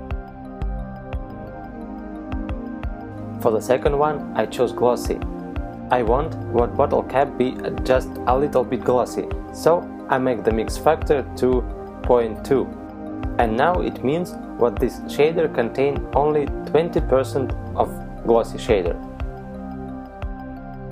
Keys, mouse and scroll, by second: 4.6 click, 12.3 click.